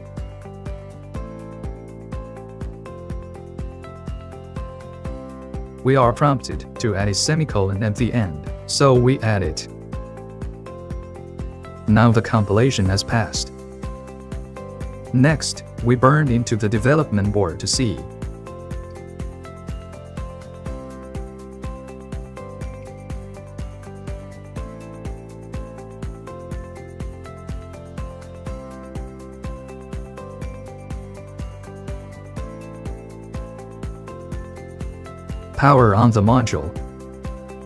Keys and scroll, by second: 0.1 Return, 10.8 ctrl+s, 11.0 Up, 11.5 Return.